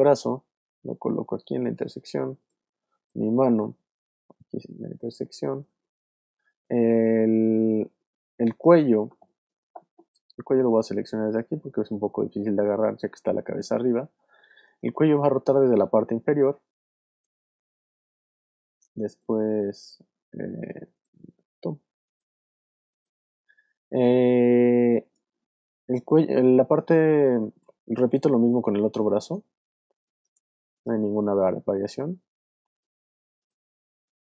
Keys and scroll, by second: 2.6 space, 5.1 space, 5.7 alt+space, 6.3 alt+space, 7.2 space, 9.0 space, 14.3 alt+space, 15.2 space, 24.2 alt+space, 25.1 space, 28.5 space, 29.4 alt+space, 29.9 alt+space, 30.8 space.